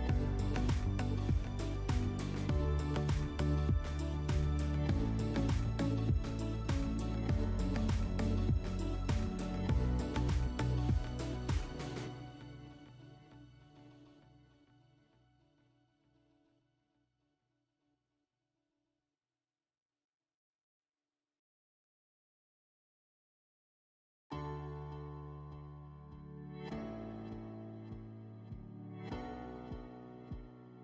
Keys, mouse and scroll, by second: 1.4 click, 2.0 click, 3.5 F4, 7.1 alt+middle click, 8.4 middle click, 16.9 click, 17.6 click, 18.0 click, 18.7 click, 21.5 click, 22.2 click, 22.5 alt+middle click, 23.4 alt+middle click, 24.0 click, 24.4 click, 24.6 click, 25.1 click, 25.3 ctrl+z, 25.7 click, 26.2 click, 26.7 click, 27.7 click, 28.2 click, 28.7 click, 29.0 ctrl+z, 29.6 click, 30.7 click.